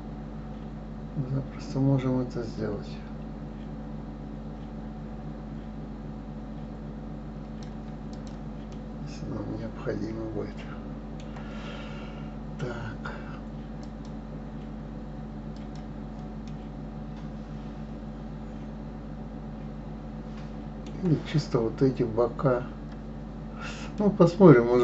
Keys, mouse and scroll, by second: 8.1 click, 8.7-11.8 middle drag, 11.8-12.3 scroll up 2, 12.5-13.8 scroll down 1, 13.8 click, 15.5 click, 16.4-19.5 middle drag, 23.9-24.8 middle drag.